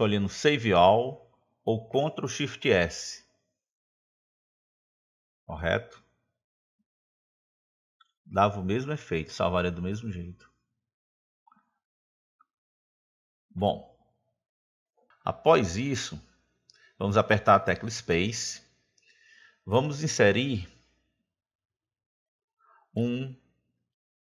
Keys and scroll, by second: 19.1 space.